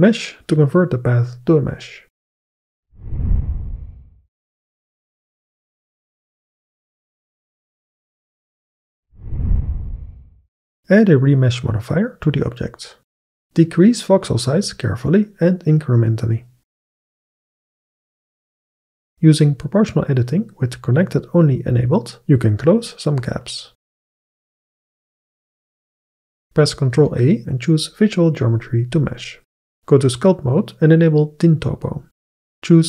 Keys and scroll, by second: 15.3 KP_0, 15.5 Return, 18.8 Tab, 22.6 g, 23.3 Tab, 27.2 ctrl+a.